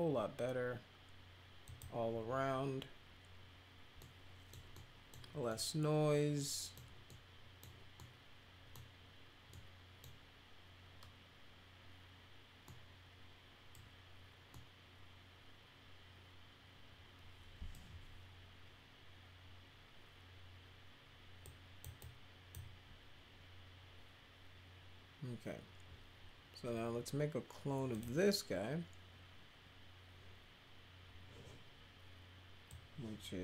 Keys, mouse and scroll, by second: 1.6 click, 4.0 middle click, 4.7 middle click, 5.4-6.7 middle drag, 7.0 middle click, 7.9 middle click, 9.5 middle click, 12.6-13.7 middle drag, 14.5-17.7 middle drag, 21.4-21.8 drag, 22.0-22.5 drag, 27.9 click, 32.6-33.4 drag.